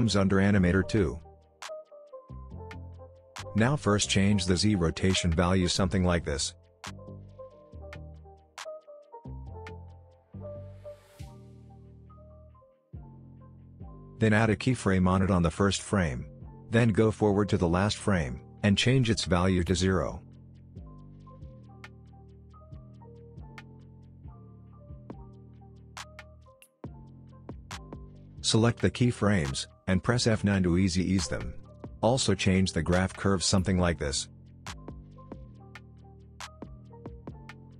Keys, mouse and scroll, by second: 2.6-4.1 drag, 9.0-9.3 click, 9.5 space, 11.6-12.5 click, 12.4 space, 14.7-15.7 drag, 21.3 Return, 22.4-23.0 click, 22.9 space, 26.8 click, 30.9 F9, 31.8-34.9 drag, 35.9 space.